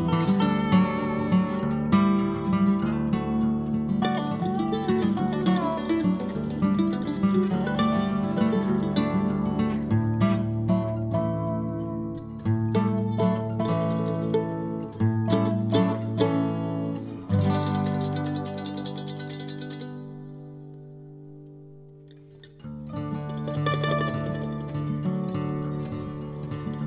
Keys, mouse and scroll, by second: 12.4-13.0 scroll up 1, 13.0-19.3 drag, 19.3 n, 19.8 click, 20.3 click, 20.9 n, 21.1-22.6 middle drag, 23.8 click, 24.4-25.9 middle drag.